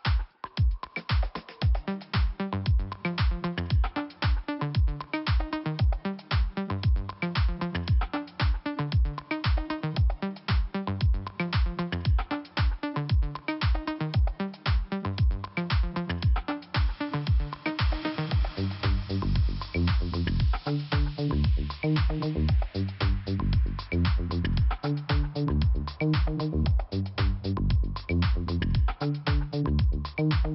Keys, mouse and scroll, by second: 0.8 click, 0.9 click, 2.5 click, 3.4 click, 3.4 click, 4.4 click, 4.5 click, 5.1 click, 6.3 click, 6.8 click, 6.9 double click, 8.0 double click, 8.1 double click, 8.8 click, 8.9 click, 10.2 click, 10.2 click, 11.4 click, 13.2 click, 13.2 click, 14.9 click, 17.3 click, 17.3 click, 19.1 click, 21.4 click, 21.6 click, 23.1 click.